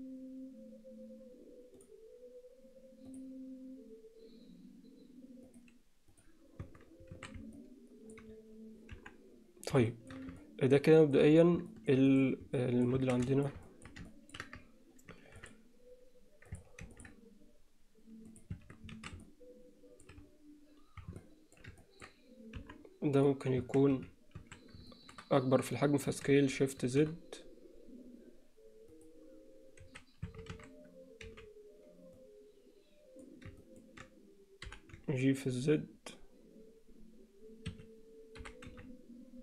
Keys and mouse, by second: 3.1 click, 5.5 click, 6.8 Tab, 7.2 alt+a, 7.6-8.2 middle drag, 9.0 KP_1, 9.9 alt+shift+middle drag, 10.4-11.2 ctrl+middle drag, 11.7 alt+shift+middle click, 12.2 click, 12.6-12.9 middle drag, 13.0 Tab, 13.4 shift+middle click, 13.7 alt+middle click, 14.1 ctrl+alt+middle click, 15.2 ctrl+r, 16.8 ctrl+r, 18.6 Tab, 19.0 alt+a, 19.2-20.0 middle drag, 21.2-21.6 alt+middle drag, 21.8 ctrl+middle click, 22.6 KP_1, 23.8 Tab, 24.0 z, 24.4 a, 24.9 alt+shift+middle click, 26.2 s, 30.0 1, 30.3 a, 31.3 b, 33.6 ctrl+middle click, 34.7 g, 38.5 g.